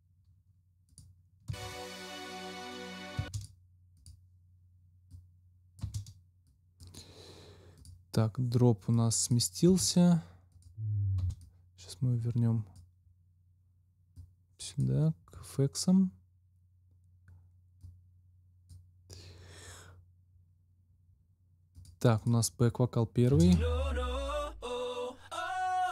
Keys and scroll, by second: 1.4 space, 3.1 space, 5.8 space, 9.6 space, 11.1 space, 23.2 space.